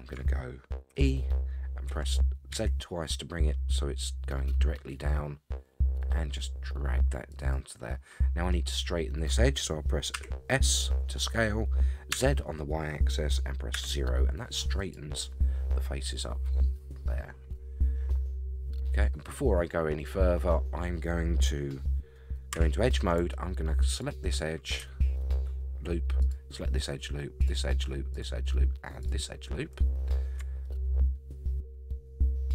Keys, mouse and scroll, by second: 0.9 e, 10.1 s, 17.5 scroll up 3, 19.2-19.6 scroll down 3, 22.5 2, 23.9 alt+click, 26.2 alt+shift+click, 27.5 alt+shift+click, 28.1 alt+shift+click, 29.0 alt+shift+click, 30.6-32.5 middle drag.